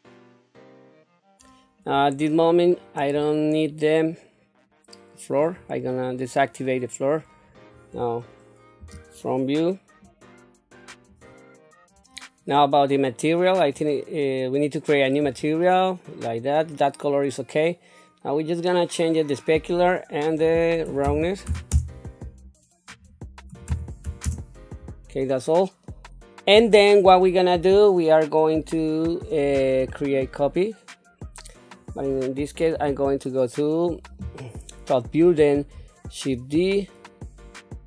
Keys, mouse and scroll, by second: 0.3 click, 0.6 scroll down 1, 0.7 middle click, 0.9 Tab, 1.0 middle click, 1.2 middle click, 1.2 click, 2.8-5.7 drag, 6.5 middle click, 7.6 click, 8.6 KP_1, 9.9 click, 10.1 click, 13.6 click, 15.3 click, 20.2-21.7 drag, 22.9-24.3 drag, 29.5 scroll down 1, 30.2-31.7 middle drag, 32.7 KP_7, 36.3 shift+d.